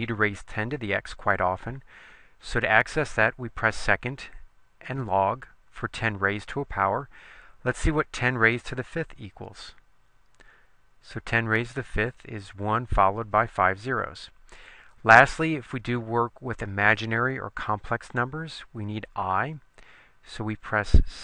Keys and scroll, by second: 8.8 5, 9.8 Return.